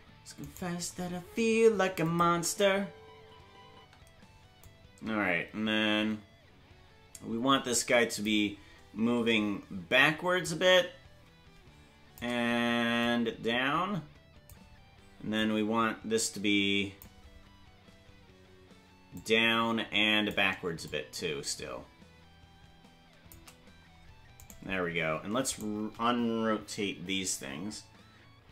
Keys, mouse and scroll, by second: 0.5 right click, 2.0 click, 2.2 space, 4.6-8.3 drag, 4.6 space, 10.4-12.2 shift+drag, 13.0-14.5 drag, 15.4-17.0 drag, 19.2-20.3 drag, 20.9-23.3 shift+drag, 24.5 right click, 25.6 shift+right click.